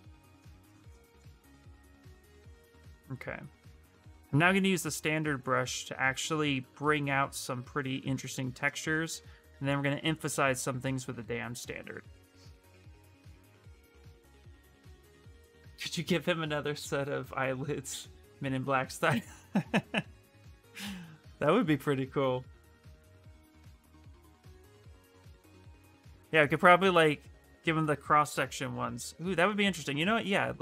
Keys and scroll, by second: 21.2-23.0 typing.